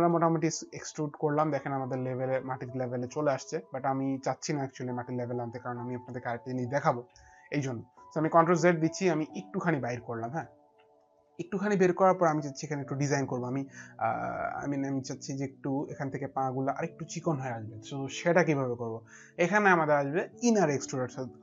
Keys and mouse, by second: 3.0 middle click, 7.9 ctrl+z, 8.8 click, 10.8 alt+click, 14.8 alt+click.